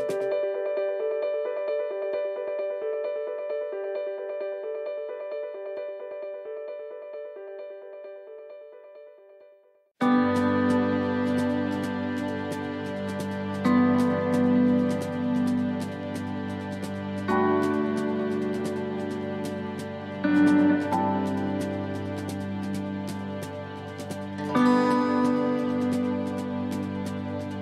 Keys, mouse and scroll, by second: 0.9 middle click, 2.4 click, 3.9 click, 6.1 middle click, 6.9 shift+middle click, 7.4-7.9 scroll up 5, 7.9 shift+middle click, 8.5 scroll up 1, 8.8 middle click, 9.9 click, 11.8 click, 13.4 middle click, 14.8 middle click, 16.1 shift+middle click, 16.3 shift+middle click, 16.8 middle click, 17.6 scroll down 2, 18.0 middle click, 18.9 shift+middle click, 20.8-21.3 scroll down 2, 21.3 middle click, 26.7 shift+d.